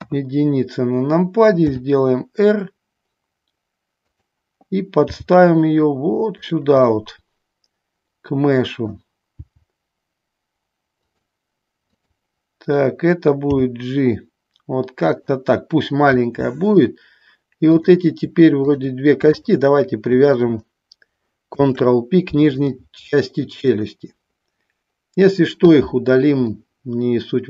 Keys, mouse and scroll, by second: 0.1 KP_1, 1.9 r, 5.3 g, 6.5 click, 7.0-9.2 middle drag, 9.5 g, 11.1 click, 12.0 click, 15.3 click, 16.4 middle click, 17.8 click, 18.8 shift+click, 19.5 shift+click, 21.7 ctrl+p, 23.9-25.7 middle drag, 26.7-27.4 middle drag.